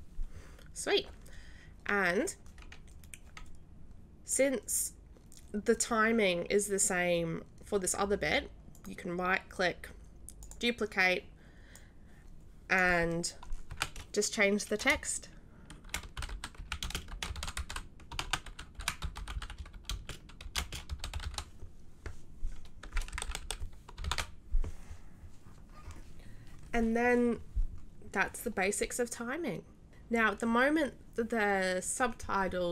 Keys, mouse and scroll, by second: 8.7 right click, 10.4 click, 11.7-13.0 drag, 16.7-18.7 typing, 20.1-21.7 typing, 24.0 shift+r.